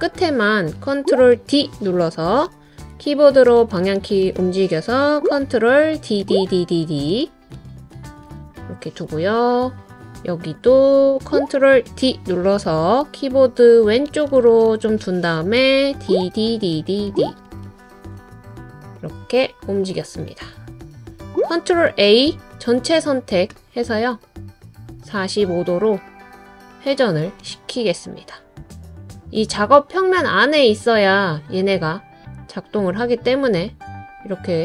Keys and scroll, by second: 1.3 super+d, 2.5 Right, 3.0 Right, 3.1 Right, 3.1 Right, 3.2 Right, 3.3 Right, 5.9 super+d, 6.2 super+d, 6.5 super+d, 11.9 super+d, 13.0 Left, 13.5 Left, 13.6 Left, 13.7 Left, 13.8 Left, 13.9 Left, 15.9 super+d, 16.2 super+d, 16.5 super+d, 22.3 super+a.